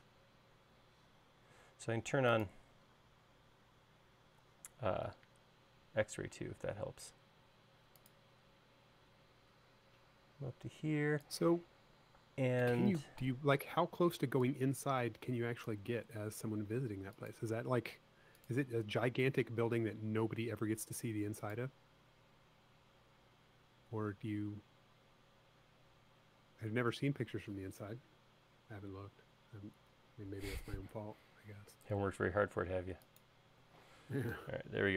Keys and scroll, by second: 12.4 space, 34.1 space.